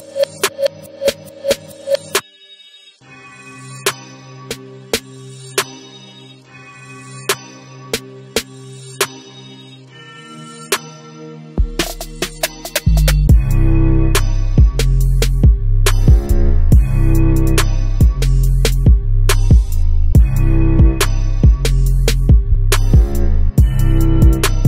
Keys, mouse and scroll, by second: 0.4 click, 1.4 g, 3.4 click, 3.7-6.5 middle drag, 4.1 scroll down 1, 5.5 ctrl+z, 6.5 click, 6.7 scroll up 1, 7.1 scroll down 1, 7.6 scroll up 1, 8.3-11.2 middle drag, 11.2 click, 13.1 click, 15.9 g, 19.2 click, 20.1-24.6 drag.